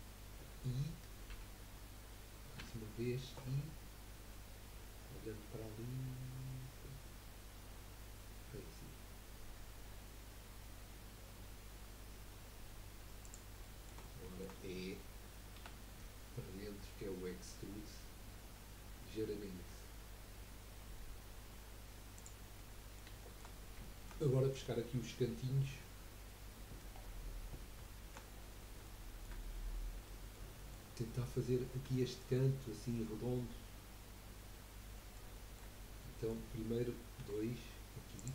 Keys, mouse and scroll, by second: 1.3 typing, 4.8-9.2 drag, 4.8-9.2 middle drag, 4.8-9.2 right drag, 13.6-16.1 middle drag, 16.1 e, 22.6 middle click, 23.1-23.7 shift+scroll up 2, 23.3 shift+middle click, 23.9-26.9 shift+middle drag, 26.9-27.3 scroll down 5, 27.4-27.7 scroll up 4, 27.8 shift+middle click, 28.3 scroll up 3, 29.0-31.6 shift+middle drag, 31.6-32.0 scroll up 1, 32.0-35.7 shift+middle drag, 35.7-36.1 scroll up 2, 36.1-37.2 middle drag, 37.2 2, 38.2 click.